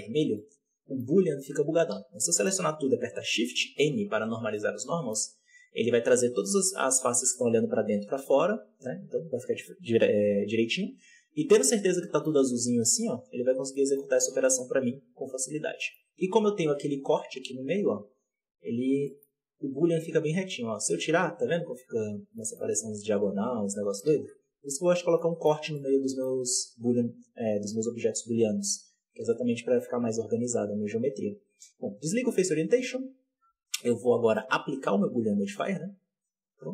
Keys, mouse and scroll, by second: 0.0 scroll down 1, 0.3-1.8 middle drag, 1.8 a, 2.2-3.5 middle drag, 3.5 shift+n, 4.4-10.6 middle drag, 10.6-11.5 scroll down 7, 10.8 Tab, 11.5-12.2 middle drag, 12.2-13.6 scroll up 10, 13.6-15.5 middle drag, 15.5 scroll down 1, 15.7 middle click, 15.9-16.7 scroll up 1, 16.7 right click, 17.8-18.7 scroll down 7, 18.2 Tab, 18.7 alt+a, 19.0-19.5 middle drag, 19.5 alt+shift+right click, 20.6-22.3 drag, 22.3 middle drag, 22.5-23.7 scroll up 4, 23.7 scroll up 1, 24.0 ctrl+z, 25.1-26.3 middle drag, 26.3-28.1 scroll up 1, 28.1 Tab, 31.5-33.3 drag, 33.3 alt+a, 33.4-36.4 scroll up 4, 36.4-36.7 drag.